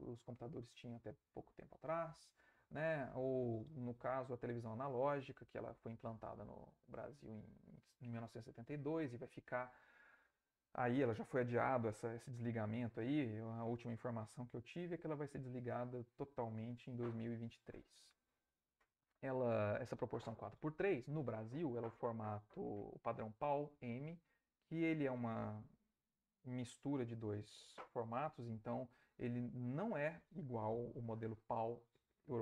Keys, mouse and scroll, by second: 2.1 Right.